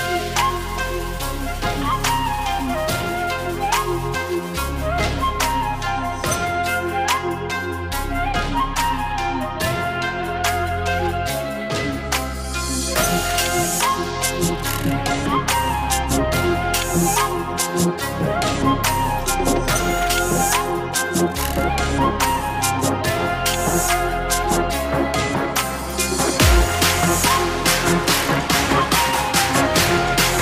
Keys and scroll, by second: 8.0 x, 9.9-10.8 typing.